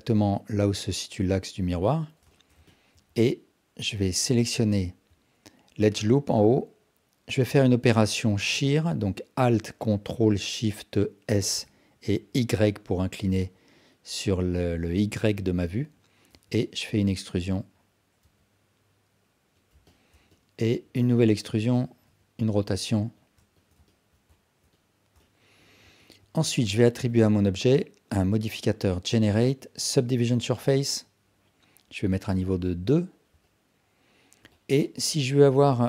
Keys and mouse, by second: 2.4 alt+shift+click, 2.7 ctrl+alt+click, 4.3 alt+shift+drag, 4.7 ctrl+alt+drag, 11.4 ctrl+alt+shift+s, 16.4 e, 18.3 r, 19.9 ctrl+alt+click, 20.4 alt+shift+click, 21.0 e, 22.1 r, 23.9 ctrl+alt+drag, 24.4 alt+shift+click, 24.7-25.1 alt+drag, 25.3 alt+shift+drag, 25.9 Tab, 27.2-30.5 drag, 32.6 click, 33.4-34.4 alt+drag, 34.5 alt+shift+drag, 34.9 alt+click, 35.5 Tab.